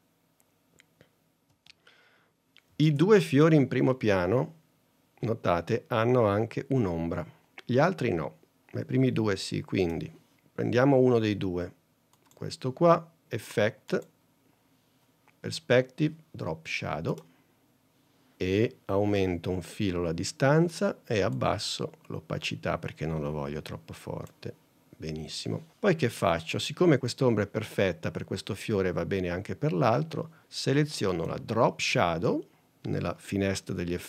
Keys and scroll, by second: 1.6 space, 2.9 super+Tab.